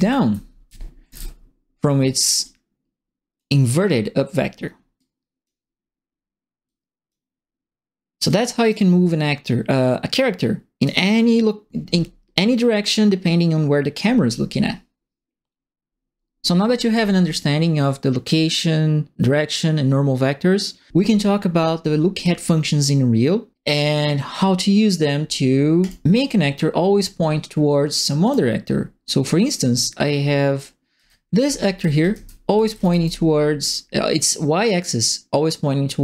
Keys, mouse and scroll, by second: 0.0-1.1 typing, 2.4 click, 4.9 click, 6.6 click, 8.2 click, 10.1 click, 25.8 click, 28.2 click, 30.5-33.0 right drag, 30.9-33.2 typing.